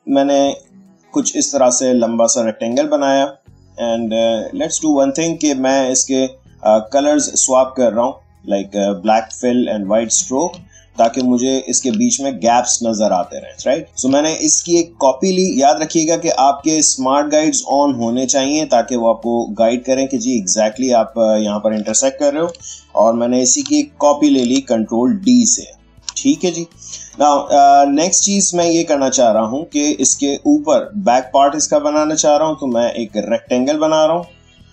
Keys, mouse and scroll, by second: 6.0 click, 9.1 ctrl+space, 9.5-12.9 ctrl+drag, 12.9 alt+click, 13.8 ctrl+z, 14.5-23.4 alt+drag, 23.4 ctrl+d, 24.3 space, 24.9-28.6 drag, 28.6 space, 28.8 click, 29.1 space, 30.0 click, 30.1 space, 31.6-34.7 drag.